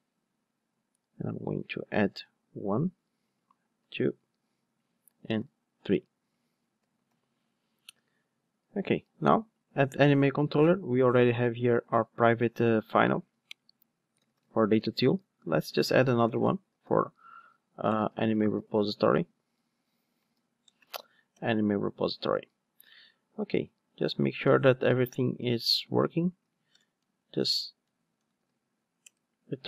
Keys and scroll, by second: 0.0 super+v, 7.0 alt+super+l, 11.6 Tab, 19.6 Return, 22.0 alt+super+l, 27.5 alt+BackSpace, 29.0 Return.